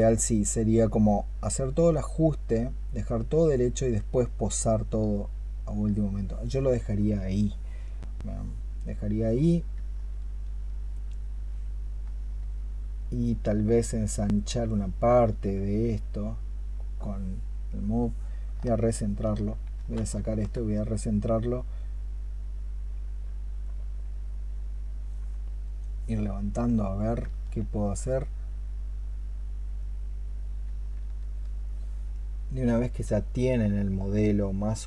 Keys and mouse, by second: 18.7 alt+click, 20.1 alt+click.